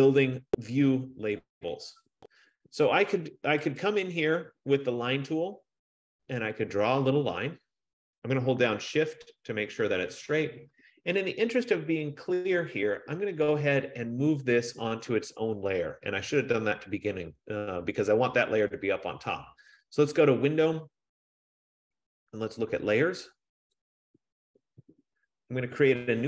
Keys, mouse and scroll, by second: 4.2 click, 8.8 click, 10.3 shift+click, 20.1 click, 24.1 click.